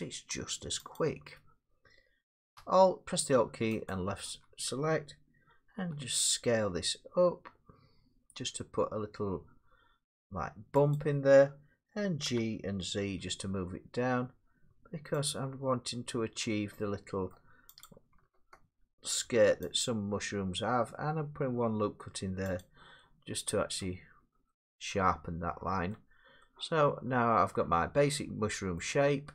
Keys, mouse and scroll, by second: 1.0 click, 3.9 alt+click, 5.7 s, 10.9 click, 12.3 g, 13.2 z, 15.3 click, 17.3 middle click, 17.9 click, 19.2 ctrl+r, 19.8 click, 22.6 click, 23.8 middle click, 24.2 Tab, 25.9 middle click, 26.1 middle click, 26.1 middle click, 28.8 middle click, 28.9 Tab.